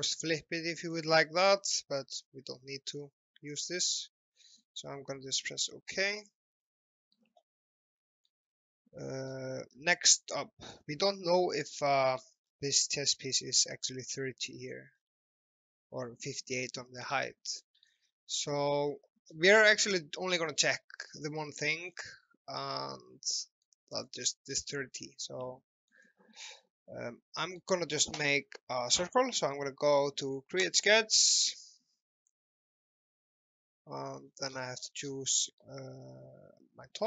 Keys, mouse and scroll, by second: 6.3 click, 6.9 middle click, 7.6 middle click, 8.5 scroll down 1, 8.9 middle click, 9.8 shift+middle click, 12.3 scroll down 1, 15.0-15.6 scroll up 1, 17.3 alt+middle click, 18.0 middle click, 20.4 scroll down 1, 21.9-22.4 scroll up 1, 22.6 middle click, 24.0 scroll up 1, 24.3 scroll down 1, 25.1 middle click, 26.1 middle click, 26.7 shift+middle click, 27.8 alt+middle click, 30.6 click, 34.3 scroll down 1, 34.5 scroll up 1, 35.6 alt+middle click.